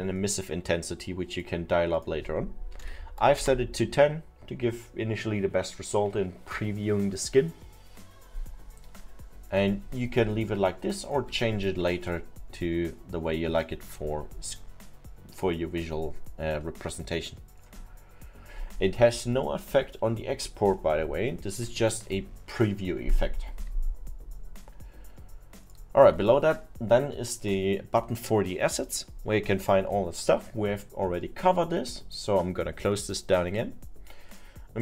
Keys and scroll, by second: 2.6-3.4 typing, 3.5 Return.